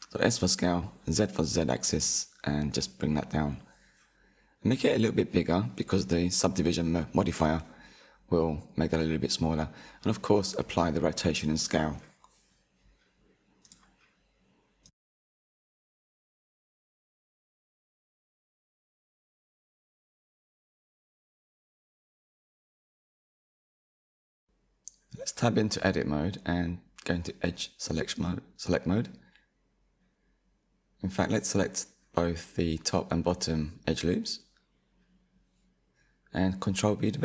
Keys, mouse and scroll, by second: 2.6-3.8 scroll down 1, 3.8 s, 8.1 ctrl+a, 11.6-12.3 scroll down 2, 14.1-17.3 middle drag, 20.4-21.1 scroll down 2, 21.1 middle click, 22.1-22.6 drag, 22.6-23.8 scroll up 4, 23.8 Tab, 24.3-25.3 scroll up 2, 25.3-26.5 drag, 27.6 ctrl+b, 30.5 ctrl+z, 32.0 click, 32.7 alt+click, 33.5 alt+shift+click, 34.7 ctrl+b.